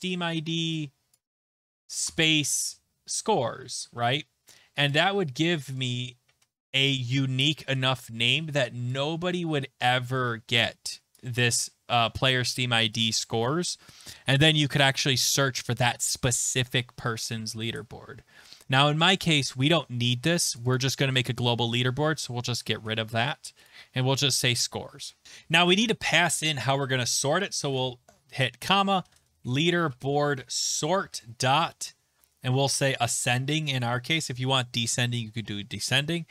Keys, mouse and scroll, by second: 0.3 middle click, 1.1 scroll, 1.1 click, 1.6 click, 4.9 click, 11.1 click, 13.2 click, 20.5 click, 20.7 click, 22.4 click, 22.8 BackSpace, 23.7 click, 25.2 click, 28.7-31.1 typing, 32.7 Tab, 34.0-34.8 typing, 36.0-36.3 typing.